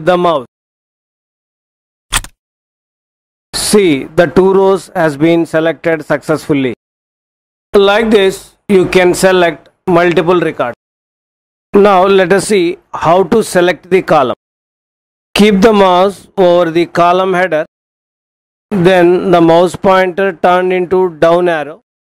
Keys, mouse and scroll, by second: 2.1 shift+click.